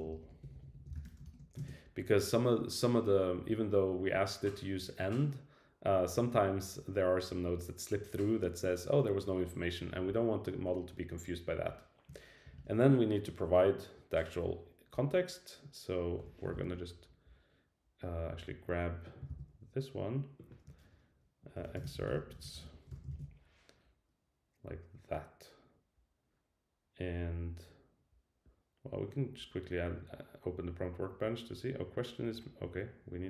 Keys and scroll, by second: 12.5 shift+Return, 19.3 super+c, 23.1 super+v.